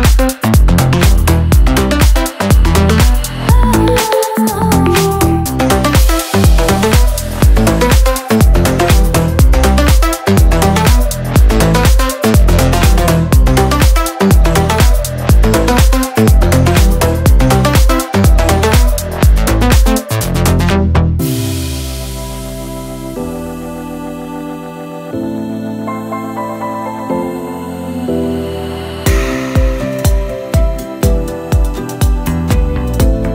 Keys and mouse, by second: 0.0 a, 0.5 middle click, 0.7 middle click, 1.8 middle drag, 2.5 middle click, 2.9 middle click, 3.9 a, 5.0 ctrl+z, 5.6 KP_Decimal, 6.0 Delete, 6.3 ctrl+z, 6.5 f, 6.7 a, 7.3 middle click, 8.0 ctrl+z, 8.6 ctrl+z, 8.8 ctrl+z, 9.2 middle click, 9.6 middle click, 9.9 a, 9.9 l, 10.4 Delete, 10.5 click, 11.0 click, 11.3 click, 11.4 e, 11.6 s, 11.6 f, 12.0 a, 14.6 click, 15.5 click, 16.2 middle click, 16.6 middle click, 17.5 z, 17.5 c, 17.8 Delete, 17.9 Delete, 18.3 f, 18.4 right click, 18.5 a, 19.5 middle click, 19.7 middle click, 19.9 click, 20.1 a, 20.5 l, 20.6 Delete, 21.1 click, 21.4 middle click, 21.6 middle click, 21.8 middle click, 22.0 Delete, 22.4-22.8 typing, 23.1 middle click, 23.2 middle click, 23.8 middle click, 23.9 a, 24.1 middle click, 24.5 right click, 24.8 middle click, 25.2-25.6 middle drag, 25.6-29.1 typing, 26.0 Delete, 30.9 f, 31.9-33.1 typing.